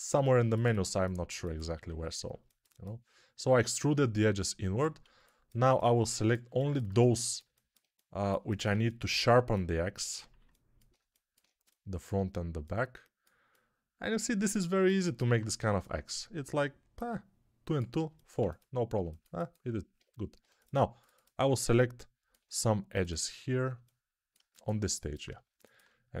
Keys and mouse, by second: 1.7 1, 4.9 alt+z, 6.3-8.6 alt+drag, 18.3 alt+z, 18.9-21.4 ctrl+alt+drag, 20.3 2, 21.4-26.2 alt+middle drag.